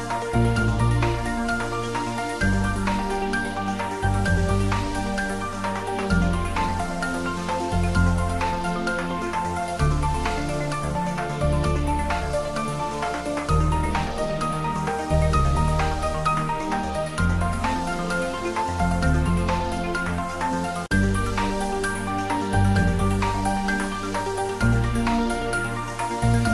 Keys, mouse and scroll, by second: 0.3 click, 5.4 click, 7.2-10.4 drag, 10.4-12.9 drag, 12.9 scroll up 1, 15.7 click, 18.0 click, 19.4-20.2 scroll up 1, 20.2-21.4 middle drag, 21.4 click, 22.5 click, 23.7 click, 25.6 click.